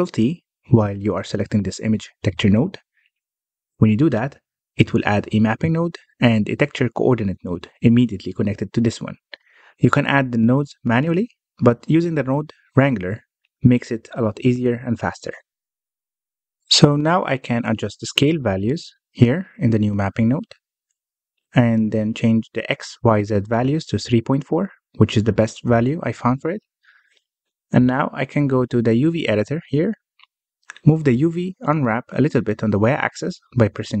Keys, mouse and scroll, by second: 0.7 ctrl+t, 2.5-4.4 middle drag, 4.4-5.1 scroll up 1, 5.1-6.9 middle drag, 6.9-10.1 drag, 10.1 scroll up 2, 12.7 scroll up 1, 17.8-18.8 scroll up 1, 18.8-22.0 drag, 25.8-26.2 scroll down 1, 26.2-29.1 middle drag, 29.1 click, 29.6 Tab, 30.0 a, 31.1 u, 33.8-34.0 scroll up 2.